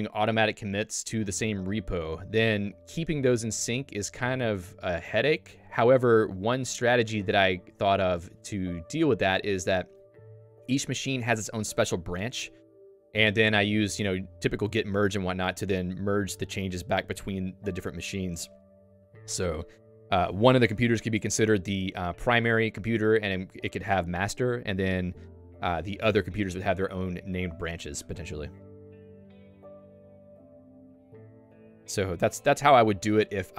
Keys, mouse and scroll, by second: 33.1 super+1.